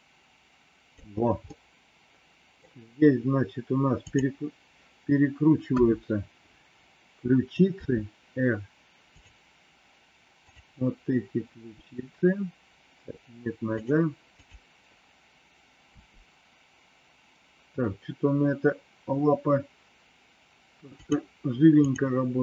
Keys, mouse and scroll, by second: 1.4-2.5 middle drag, 5.7 KP_1, 7.8 r, 10.3 click, 11.8 r, 14.4 click, 16.0 r, 21.8 click.